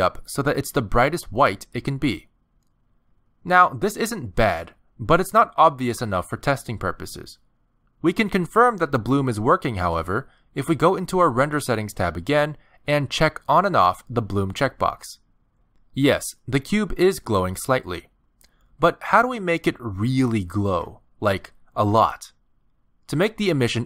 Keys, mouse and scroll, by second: 6.7 middle click, 9.8 click, 12.7 click, 13.4 click, 14.3 click, 14.7 click, 16.5 middle click, 18.4 click, 18.7 click.